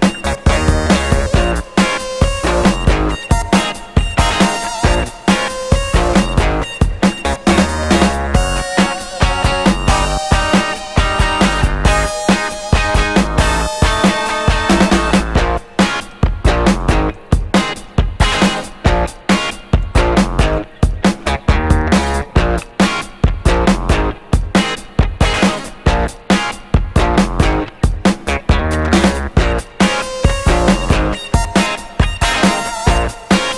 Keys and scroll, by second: 4.2 Escape, 4.8 0, 5.4 Return, 6.1 0, 6.2 Return, 9.1 3, 9.7 3, 12.2 ., 12.7 2, 17.8 0, 18.9 3.